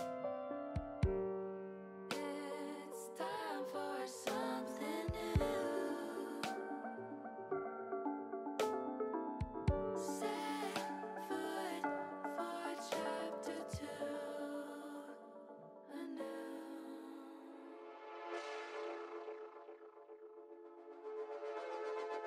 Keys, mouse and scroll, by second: 1.6 click, 2.6-5.2 drag, 7.0 KP_1, 8.3 middle click, 9.4 middle click, 10.8 e, 12.0 click, 12.4 s, 14.1 click, 14.4-15.9 middle drag, 16.0 middle click, 17.8 ctrl+r, 20.7 click, 21.3 middle click.